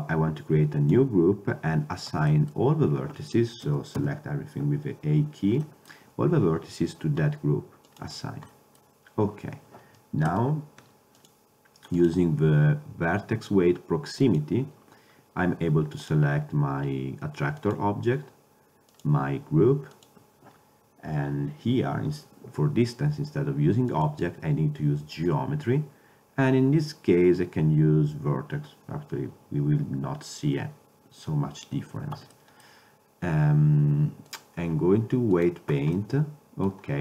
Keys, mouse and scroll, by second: 2.4 middle click, 2.8-4.1 middle drag, 3.8 a, 4.1 a, 5.8-7.3 middle drag, 8.0-8.6 drag, 8.6-9.6 middle drag, 9.6 click, 9.8 middle click, 10.4 Tab, 11.3-13.9 drag, 16.1-18.0 drag, 19.0-20.8 drag, 24.0-25.8 drag, 36.1-36.4 middle drag.